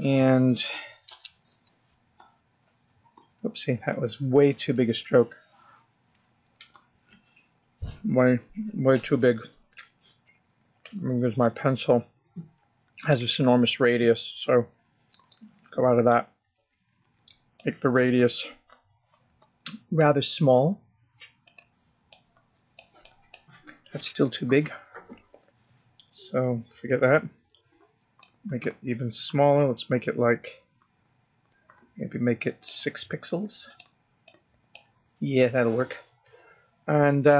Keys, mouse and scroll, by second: 4.1 click, 19.4 click, 23.3 click, 24.0 click, 30.0 click, 35.6 click, 36.1 click.